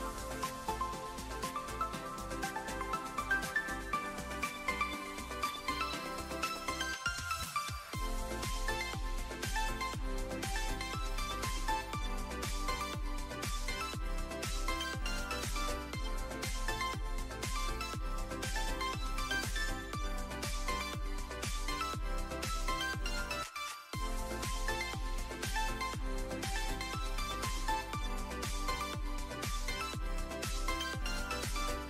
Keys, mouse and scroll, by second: 3.9 drag, 4.7 click, 12.8 click, 13.4 alt+middle drag, 14.4 ctrl+s, 15.2 click, 16.9 alt+middle drag, 17.8 ctrl+s, 19.0 middle drag, 19.9 click.